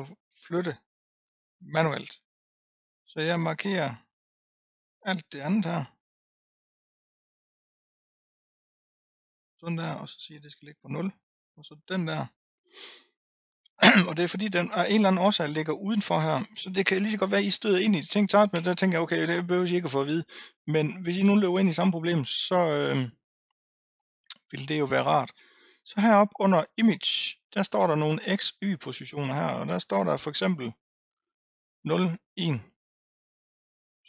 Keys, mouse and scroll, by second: 4.2 drag, 8.0 shift+click, 8.9 shift+click, 10.9-12.0 drag, 15.1-16.2 scroll up 2, 26.7 click.